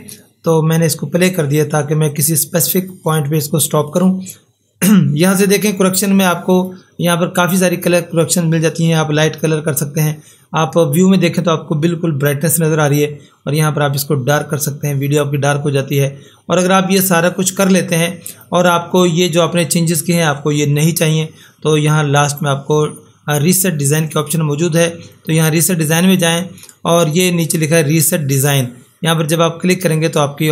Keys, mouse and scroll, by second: 2.1 click, 2.3 click, 6.5 click, 18.3 click, 25.2 click, 29.2 click.